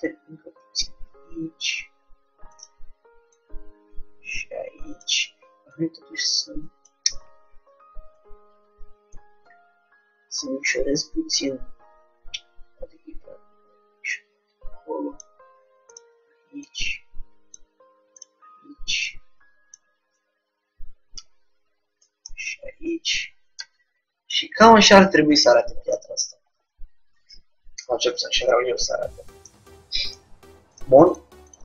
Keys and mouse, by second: 2.6-7.4 drag, 7.3 ctrl+z, 9.1-10.9 drag, 16.0-20.8 drag, 22.3-23.7 middle drag, 23.7 Tab, 31.2-31.6 drag.